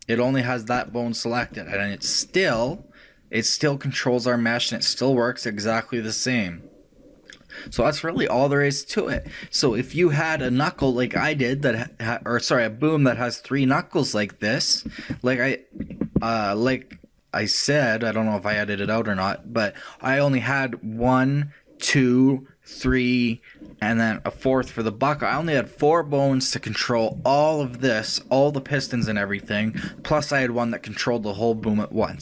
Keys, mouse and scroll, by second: 2.6 r, 9.8-14.2 middle drag, 15.1 shift+middle click, 16.0-17.2 shift+middle drag.